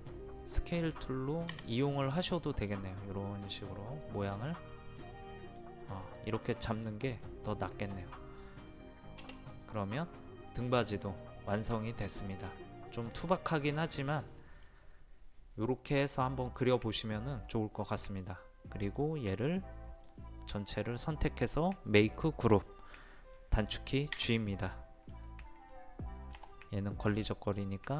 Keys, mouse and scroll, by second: 1.5 Escape, 2.5 click, 6.4-8.8 middle drag, 9.6 click, 10.1-13.5 middle drag, 13.5 scroll down 1, 13.6 scroll up 1, 13.8-14.2 scroll down 1, 14.2 middle click, 17.3-17.7 scroll down 1, 17.8 middle click, 18.9-20.8 drag, 24.1 a, 24.5-25.8 middle drag, 26.3 m, 27.3 click.